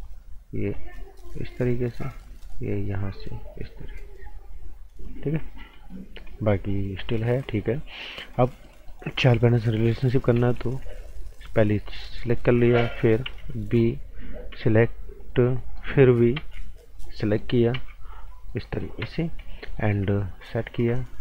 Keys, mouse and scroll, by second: 5.2 scroll down 1, 5.4 right click, 6.0 scroll down 1, 6.3 right click, 6.7 scroll up 1, 7.0 right click, 7.3 scroll up 1, 7.4 right click, 9.3 click, 11.4 b, 11.9 click, 12.2 right click, 13.2 b, 13.8 click, 14.5 p, 15.2 click, 15.6 right click, 16.3 b, 16.9 click, 17.1 right click, 17.7 p, 18.2 click, 18.5 right click, 19.0 z, 19.2 scroll down 1, 19.4 right click, 20.4 click, 20.7 z.